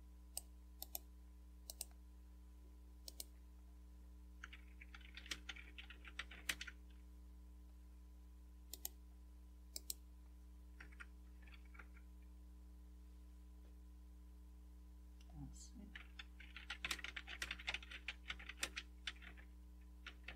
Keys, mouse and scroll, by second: 1.0 click, 1.7 click, 3.1 click, 4.7-6.8 typing, 8.7 right click, 9.8 click, 11.2 Right, 11.2-11.8 typing, 16.2-20.3 typing.